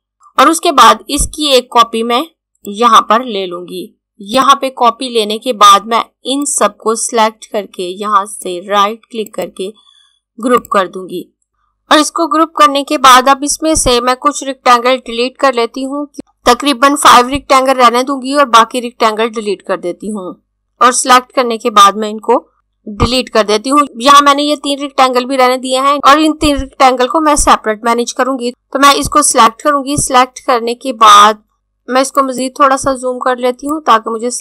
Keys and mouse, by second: 0.1 click, 4.3 click, 9.3 right click, 10.5 click, 20.6 click, 23.0 Delete, 25.9 click, 28.5 z, 29.3 click, 32.3 click, 33.9 click.